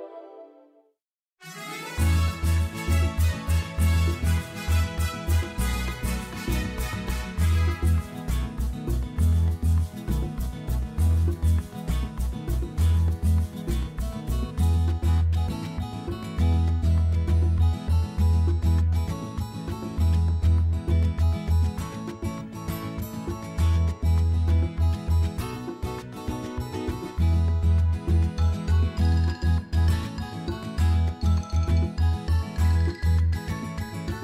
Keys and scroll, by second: 3.2 shift+z, 6.2 r, 8.2 g, 9.5 y, 10.9 alt+a, 28.7 Tab, 29.2 a, 32.9 s.